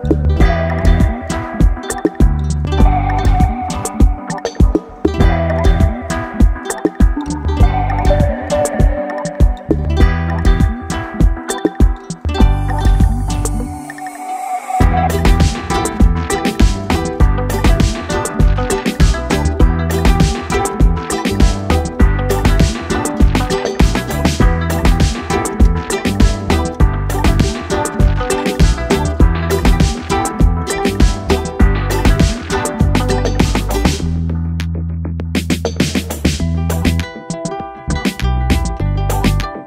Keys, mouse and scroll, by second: 1.1 click, 2.3 Down, 4.9 click, 7.5 click, 9.6 ctrl+click, 12.5 ctrl+click, 13.2 shift+i, 15.5 click, 17.8 ctrl+space, 17.9 ctrl+click, 18.2 ctrl+space, 19.1 ctrl+space, 19.2 ctrl+click, 19.6 ctrl+space, 20.3-28.3 drag, 28.3 space, 28.5 click, 28.7 space, 29.5-31.8 drag, 31.8 space, 32.2-34.3 drag, 34.3 space, 34.5 click, 35.2-37.2 drag, 37.2 ctrl+d, 37.6 space, 37.8 click, 38.0 space.